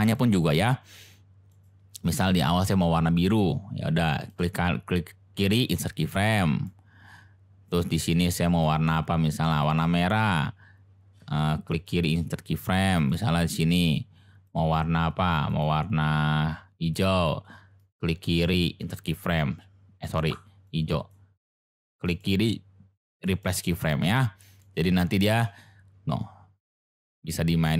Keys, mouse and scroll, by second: 0.0 click, 1.5 click, 4.2-5.6 drag, 6.6-7.6 drag, 11.7 click, 13.1-14.4 drag, 18.2 click, 22.0 click, 24.6 click, 25.2 space.